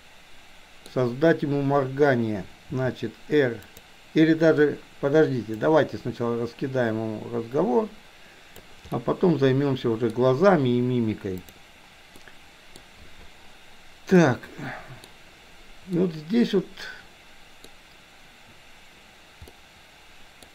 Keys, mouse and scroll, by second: 2.7 r, 5.6-8.7 drag, 9.0-10.1 middle drag, 12.3-12.8 middle drag, 14.3-15.1 middle drag, 16.0-17.7 middle drag, 19.6-20.5 middle drag.